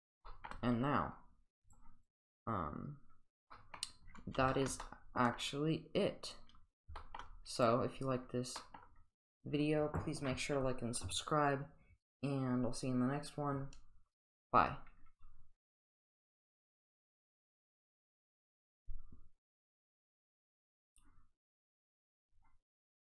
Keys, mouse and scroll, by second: 0.2 shift+middle drag, 1.6 click, 2.0 click, 2.0 click, 3.5 middle click, 4.5 shift+middle click, 4.8-5.4 middle drag, 6.3 click, 7.0 shift+middle drag, 7.6 click, 8.5 middle click, 9.9 click, 10.0 click, 16.5-18.3 drag.